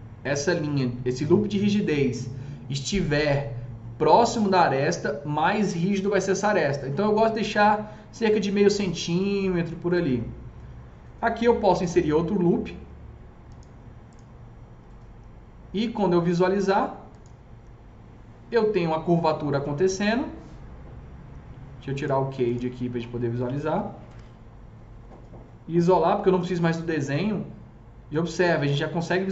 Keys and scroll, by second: 11.5 KP_0, 23.7 F3, 23.9 F3, 24.1 F4, 24.6 F4, 25.8 alt+q.